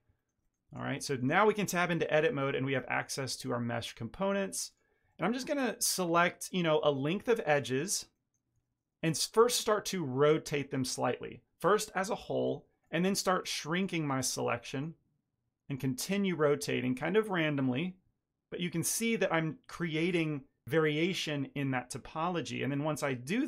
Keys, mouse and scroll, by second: 0.1 ctrl+middle click, 0.6 Tab, 1.0 shift+middle click, 2.3 2, 2.8 ctrl+middle click, 3.3 shift+middle click, 3.6 middle click, 4.6 click, 5.0 ctrl+middle click, 5.3 middle click, 6.1 ctrl+middle click, 7.4 ctrl+click, 8.0 ctrl+middle click, 9.0 r, 12.7 click, 13.6 ctrl+click, 14.6 r, 16.3 click, 16.8 ctrl+click, 17.6 r, 18.9 Tab, 23.1 Tab.